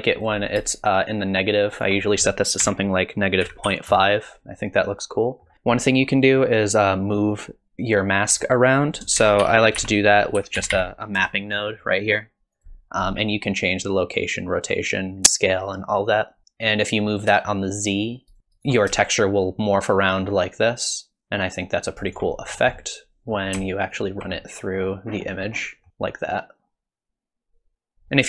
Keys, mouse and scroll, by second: 0.9 shift+click, 2.1 click, 4.9 middle click, 8.8 click, 9.2 shift+a, 10.7 p, 15.5 middle click, 17.5 shift+click, 18.4 ctrl+shift+click, 19.1 shift+click, 22.4-22.8 scroll down 5, 22.8 middle click, 23.9 ctrl+shift+click, 24.4 middle click, 25.1-25.6 scroll up 7, 25.6 middle click, 25.9 middle click, 25.9 shift+click.